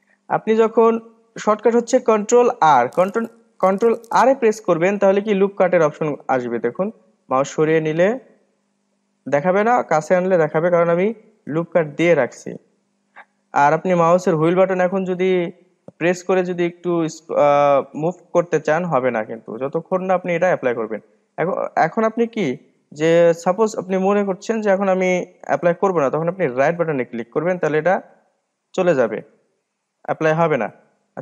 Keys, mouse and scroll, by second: 4.5 ctrl+r, 28.9-31.2 middle drag.